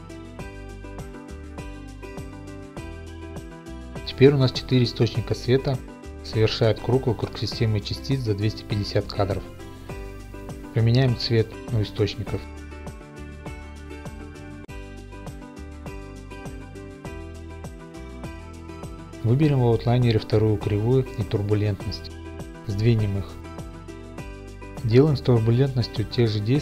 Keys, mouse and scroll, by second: 0.0-0.4 typing, 0.5 right click, 0.7 click, 2.4 Right, 2.4 click, 2.7 typing, 3.0 Return, 3.8 right click, 4.0 click, 12.8 click, 13.4 click, 13.8 click, 15.5 click, 16.0 click, 16.6 click, 21.2 ctrl+click, 23.7 click, 23.7 g, 25.2 click, 25.2 ., 26.4 click.